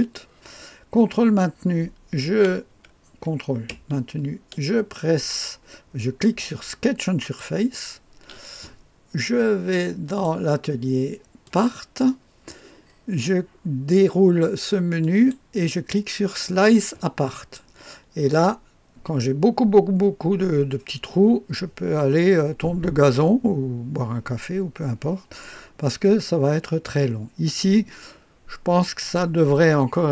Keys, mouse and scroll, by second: 7.1 ctrl+click, 10.0 click, 11.4 click, 15.0 click, 17.2 click.